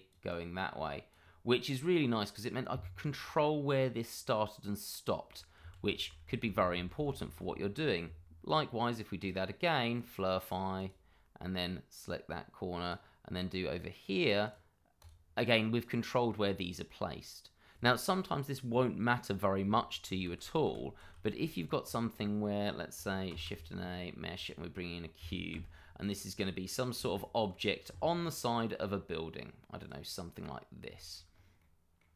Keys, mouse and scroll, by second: 5.6 ctrl+z, 7.6 shift+middle click, 8.4 click, 20.2 ctrl+z, 23.3 shift+a, 24.9 scroll down 1, 25.5 s, 26.9 g, 29.8 click, 30.1 middle click, 30.9 shift+middle click, 31.3 scroll up 1, 31.6 middle click.